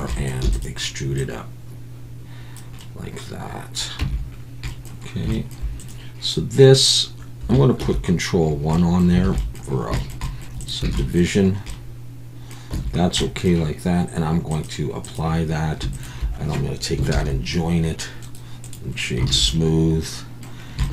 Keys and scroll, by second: 0.4 e, 4.0 Tab, 7.8 ctrl+1, 9.2 alt+a, 11.0 Tab, 12.7 Tab, 17.1 ctrl+j, 19.3 alt+a.